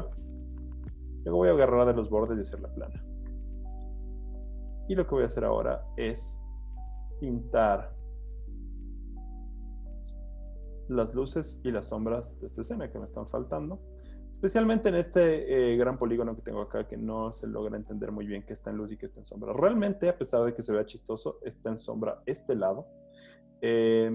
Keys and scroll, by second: 3.3 Return, 8.2 z, 9.2 z, 10.5-11.5 typing, 13.8 z, 16.6 z, 18.0 z, 18.5 z, 19.5 z, 20.5 z, 23.0 z.